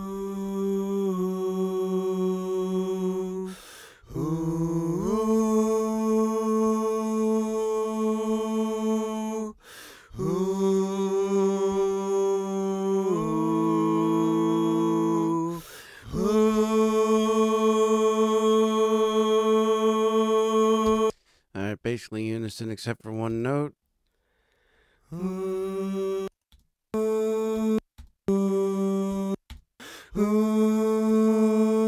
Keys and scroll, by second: 20.8 space, 23.3 space, 24.3 space, 26.0 space, 27.5 space, 29.1 space.